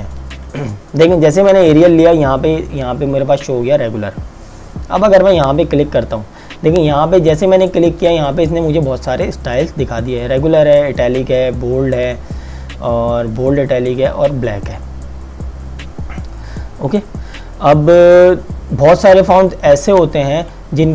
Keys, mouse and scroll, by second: 5.3 click, 18.3 click.